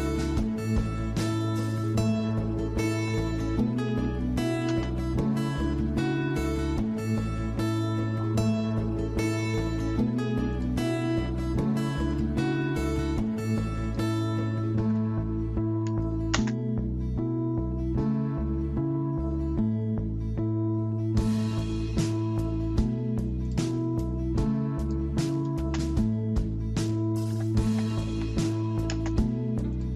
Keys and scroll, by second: 3.0-3.8 typing, 4.7 Return, 12.6 Escape, 14.5-16.4 typing, 27.3-28.0 typing.